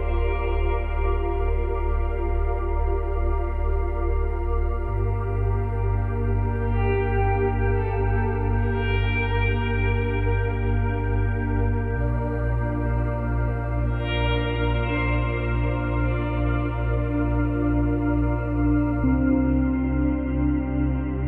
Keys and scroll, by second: 8.8 space, 15.1 space, 16.9 space, 19.3 space.